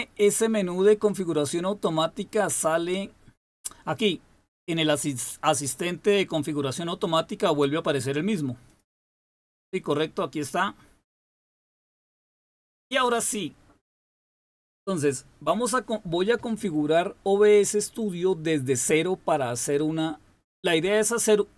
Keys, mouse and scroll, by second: 2.5 click, 8.6 click, 9.0-12.0 drag, 12.6 super+w.